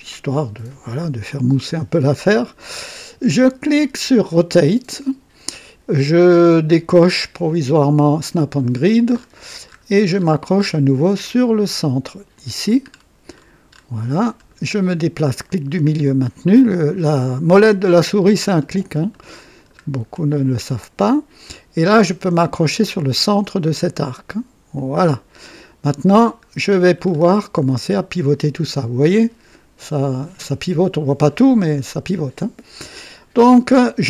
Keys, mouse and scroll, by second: 4.3 click, 8.3 click, 9.1-10.8 scroll up 7, 12.3 click, 12.9-14.0 scroll down 4, 14.5-15.6 middle drag, 15.9 middle click, 17.9-18.7 scroll up 4, 19.1 middle click, 20.0-20.3 scroll up 2, 24.7 click, 26.5-27.3 scroll down 3.